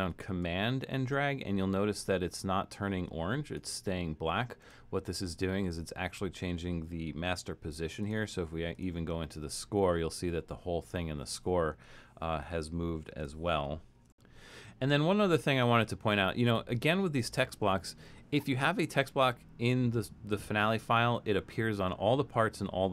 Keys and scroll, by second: 12.0 shift+super+{, 13.0 alt+super+..